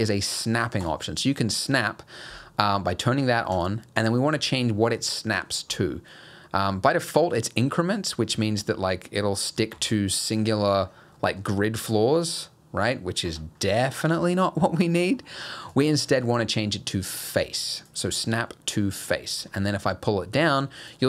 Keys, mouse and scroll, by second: 0.8 click, 3.5 click, 7.9-9.9 scroll down 3, 8.3 g, 10.1-11.5 scroll down 17, 11.2 middle click, 11.5 g, 13.6-14.9 scroll up 19, 14.9 middle click, 15.1-15.7 scroll down 1, 15.7 click, 18.2-18.5 scroll up 2, 18.5 middle click, 19.4 g.